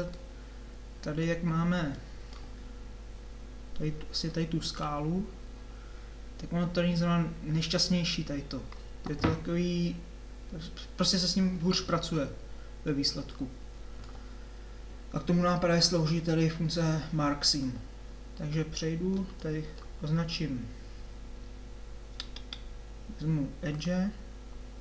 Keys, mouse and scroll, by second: 14.4-19.4 middle drag, 23.7 middle click.